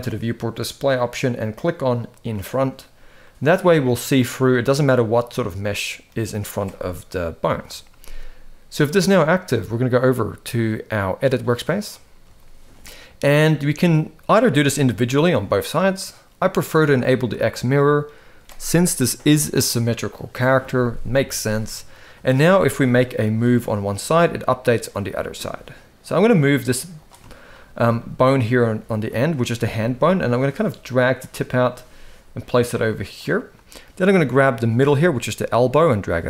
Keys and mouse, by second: 2.3 click, 3.0-5.8 middle drag, 7.2 KP_1, 8.5 click, 9.8-11.7 drag, 12.1-12.4 shift+middle drag, 13.7-14.3 drag, 14.5 g, 17.1 click, 22.2-22.6 shift+middle drag, 23.0 g, 27.0 shift+middle drag, 27.7 shift+middle click, 29.4 g, 31.5 g, 34.7 g.